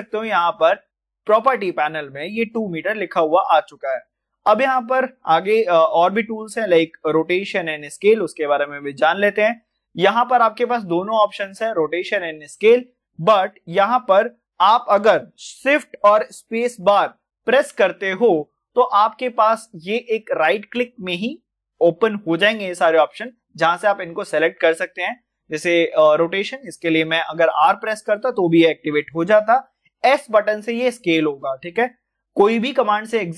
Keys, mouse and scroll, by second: 26.6 click, 29.9 click, 29.9 s.